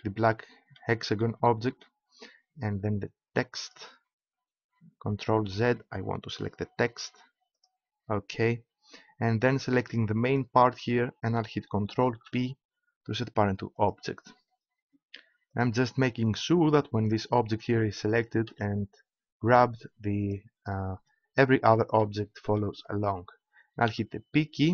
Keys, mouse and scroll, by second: 5.3 ctrl+z, 9.2 click, 10.3 click, 10.5-12.1 right drag, 12.1 ctrl+p, 15.5 right click, 17.2 right click, 17.9 click, 18.4 g, 20.8 click, 21.6 right click, 23.8 p.